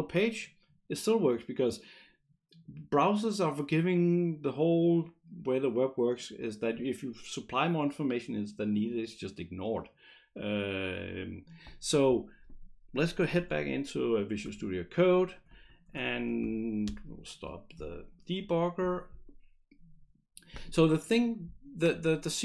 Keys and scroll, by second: 16.9 shift+F5.